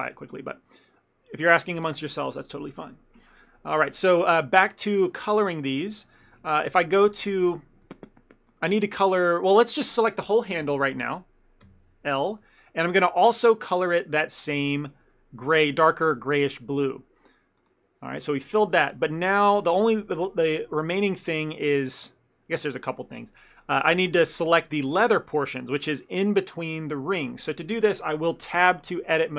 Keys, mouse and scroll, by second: 0.8 middle click, 5.5 a, 5.6 a, 6.4 shift+middle click, 6.6 ctrl+middle click, 7.2 shift+middle click, 7.9 ctrl+middle click, 10.7 ctrl+l, 11.8 l, 14.6 scroll down 1, 17.7 click, 19.1 a, 19.2 a, 20.0 middle click, 20.2 ctrl+middle click, 20.8 shift+middle click, 21.9 alt+click, 25.0 scroll up 1, 25.4 middle click, 26.5 scroll up 2, 27.4 middle click, 28.8 Tab.